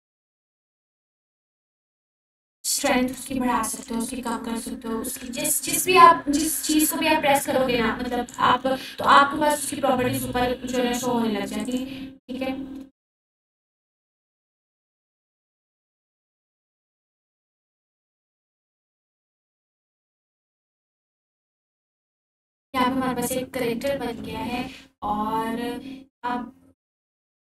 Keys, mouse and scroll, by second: 1.2 ctrl+z, 2.7-3.9 drag, 4.3 f, 4.9 f, 5.4-9.5 drag, 9.7-10.2 scroll down 2, 10.6-11.6 alt+drag, 20.0 click, 20.1-21.3 ctrl+drag, 25.4 ctrl+click, 25.7 ctrl+4.